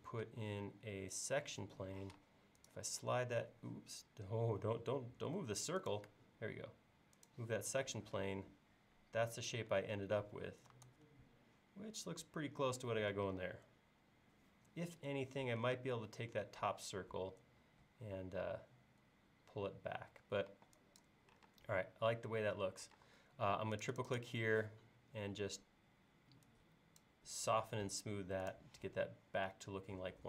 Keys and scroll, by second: 2.0 m, 4.0 Escape, 5.1 Escape, 10.9 super+Tab, 13.1 super+Tab, 15.8 space, 20.5 e, 23.0 space.